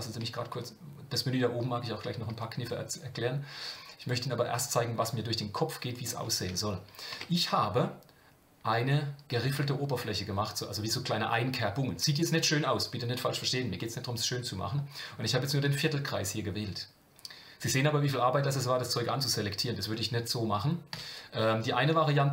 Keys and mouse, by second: 4.5-6.1 middle drag, 7.1 Tab, 20.9 KP_7.